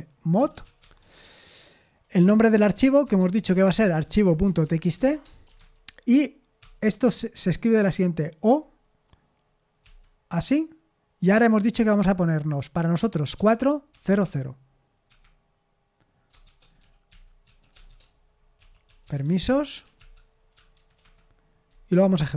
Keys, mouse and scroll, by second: 0.0-1.5 typing, 2.8-6.6 typing, 9.8 typing, 13.3-14.2 typing, 15.1 Escape, 16.2-20.7 typing, 21.0 Escape, 21.9 F5.